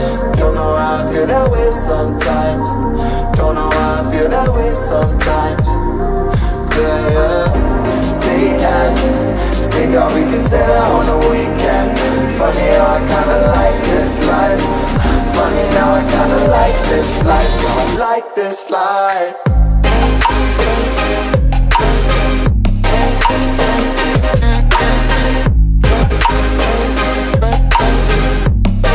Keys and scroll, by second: 0.2 Up, 0.4 Right, 15.2 space, 17.1 space.